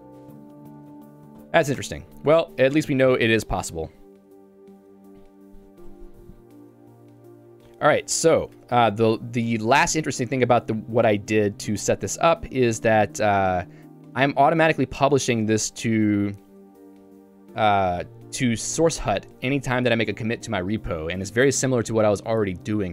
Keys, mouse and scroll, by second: 1.8 Return, 8.4 click, 8.5 Escape, 13.4 Return, 14.6-18.0 typing.